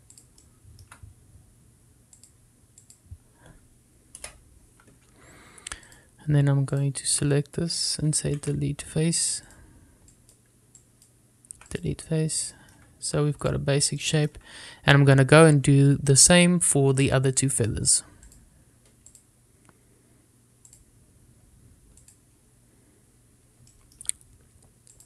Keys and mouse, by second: 7.8 click, 8.2 click, 9.6 x, 11.3 click, 12.0 click, 13.7 shift+middle click, 15.1 middle click, 18.8 click, 20.2-21.9 drag, 23.2 click, 24.8 shift+middle click.